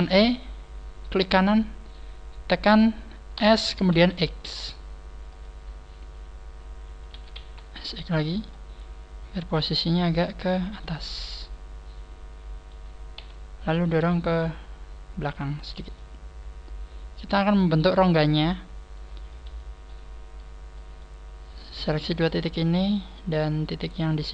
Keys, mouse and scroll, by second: 1.9 right click, 3.3 s, 7.1 s, 8.3 s, 8.6 click, 8.7 middle click, 11.2 middle click, 13.1 KP_3, 14.3 click, 15.9 middle click, 19.2 middle click, 20.2 scroll up 2, 20.7 middle click, 21.4 right click, 21.9 shift+right click, 22.4 middle click, 23.3 scroll up 3, 23.7 shift+right click, 23.7 middle click, 24.1 shift+right click.